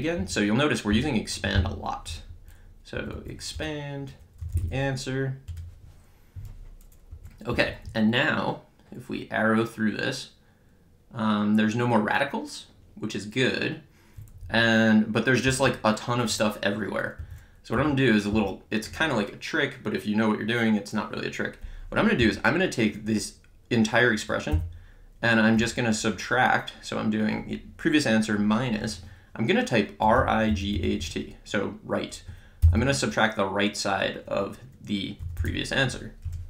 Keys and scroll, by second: 1.6 Menu, 2.1 3, 3.0 Down, 3.5 Return, 4.2-5.1 typing, 5.4 Return, 7.1 Up, 7.5 Left, 7.9 Right, 15.5 Down, 17.2 Up, 17.8 Left, 18.3 Down, 24.5 -, 25.6 Return, 29.8-31.5 typing, 32.6 (, 35.0-36.0 typing, 36.2 Return.